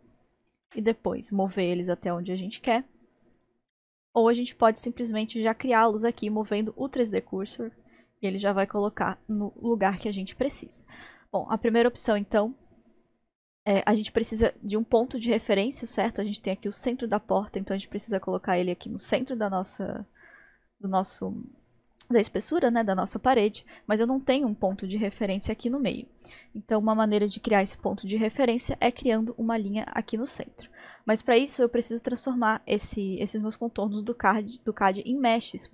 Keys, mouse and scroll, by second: 1.6 g, 3.4 click, 12.6 click, 14.3-14.7 scroll up 1, 17.8-18.3 scroll up 1, 25.8 scroll down 1, 26.3-27.1 scroll down 1, 30.8 scroll down 1, 31.3-32.7 scroll up 2, 32.8-34.5 scroll down 3, 34.5 scroll up 1.